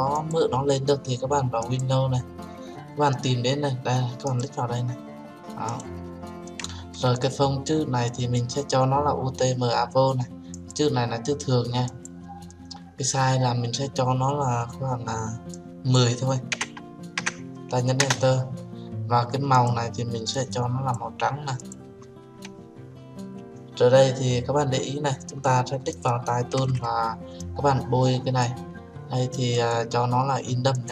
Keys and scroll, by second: 17.9 Return.